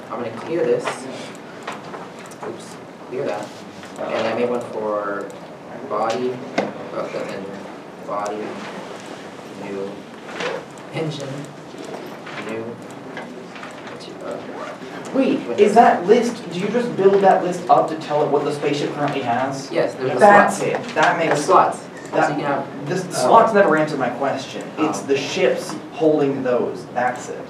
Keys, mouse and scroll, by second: 2.4 middle click, 2.5 Tab.